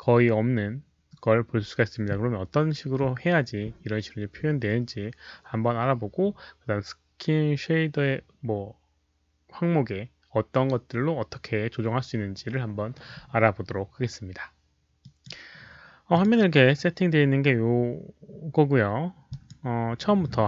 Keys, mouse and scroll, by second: 15.0 click, 16.1 click, 19.2 click.